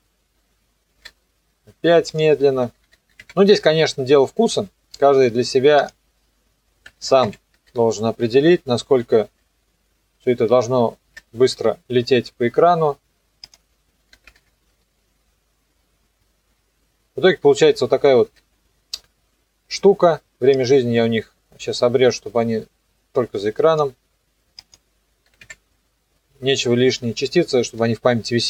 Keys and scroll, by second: 2.7 KP_8, 2.8 KP_0, 3.2 Return, 6.9 KP_2, 7.1 KP_5, 7.3 Return, 7.5 KP_0, 14.1 KP_4, 14.3 KP_0, 16.5 KP_0, 25.3 KP_4, 25.4 KP_Enter.